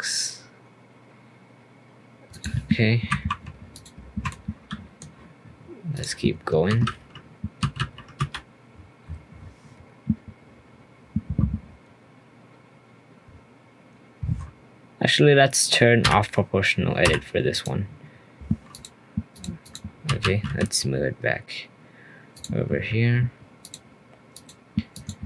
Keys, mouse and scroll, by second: 3.1 2, 3.7 alt+click, 4.3-5.9 middle drag, 5.9 click, 6.2-6.6 scroll up 1, 6.6 shift+g, 7.6 g, 18.7 click, 19.6 click, 20.0 g, 23.6 alt+click, 24.3 alt+click, 24.9 alt+click.